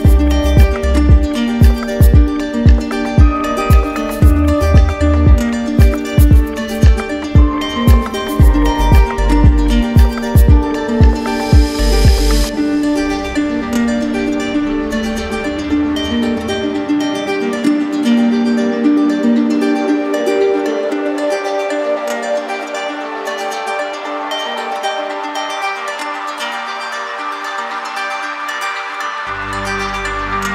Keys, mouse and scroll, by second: 1.7-2.9 drag, 10.0-11.0 right drag, 13.1-14.2 drag, 24.0-25.1 drag.